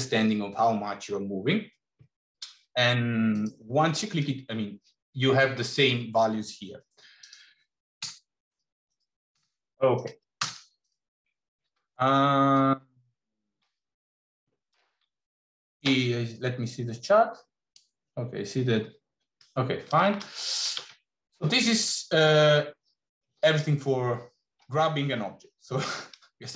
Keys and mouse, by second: 7.0-8.6 drag, 8.7 click, 9.9 click.